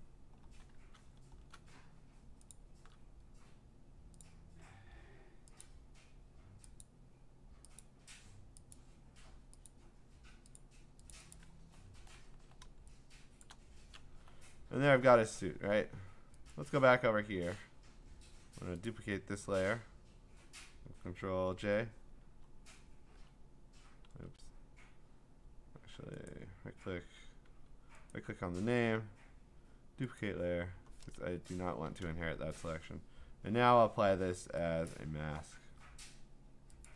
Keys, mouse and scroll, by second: 1.1 click, 1.1 scroll, 4.2 click, 5.6 click, 6.8 click, 7.8 click, 8.7 click, 9.8 click, 11.1 click, 11.4 click, 11.8-12.2 scroll, 13.4 middle click, 13.4 click, 15.1 middle click, 15.6 middle click, 16.5 click, 17.4-18.6 scroll, 18.9 click, 21.5 ctrl+j, 22.5-23.3 scroll, 24.1 ctrl+z, 26.3 right click, 27.5 Escape, 28.1 right click, 30.2 click, 31.2 Return, 34.9 click, 36.8 click.